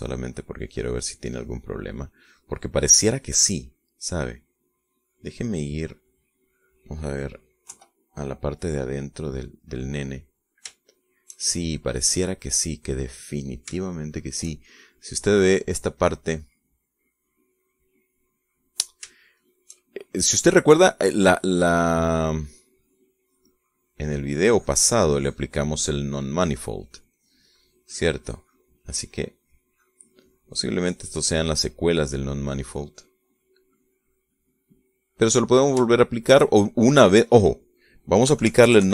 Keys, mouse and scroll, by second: 0.4 click, 1.1 click, 1.8 click, 2.5 click, 3.4 click, 4.2 click, 4.9 middle click, 5.9-7.9 middle drag, 8.9 KP_5, 10.1-11.7 middle drag, 12.0 shift+middle click, 12.7-13.7 shift+middle drag, 13.9-14.9 middle drag, 15.1 shift+middle click, 16.7 middle click, 17.5 middle click, 18.4-20.2 middle drag, 20.4 shift+middle click, 21.3-22.3 shift+middle drag, 22.5 middle click, 23.5 middle click, 24.3-26.1 drag, 26.3 click, 26.9 click, 32.8-37.0 middle drag, 37.1 shift+middle click, 38.1 middle click, 38.6 click.